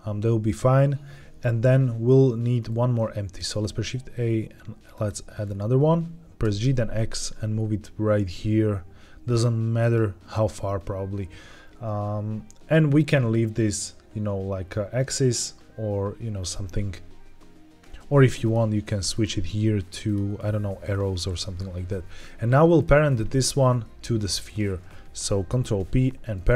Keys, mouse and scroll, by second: 3.3 shift+a, 5.3-6.4 scroll down 3, 6.4 g, 6.5 x, 9.7-11.3 drag, 18.3 click, 19.0-20.0 drag, 20.8 scroll up 1, 22.7 click, 24.2 shift+click, 25.4 ctrl+p.